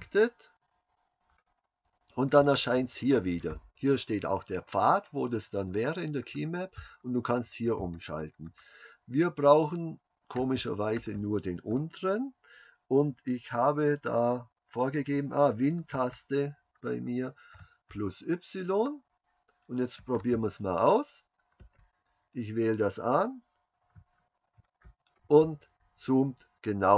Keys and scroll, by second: 24.6 super+y.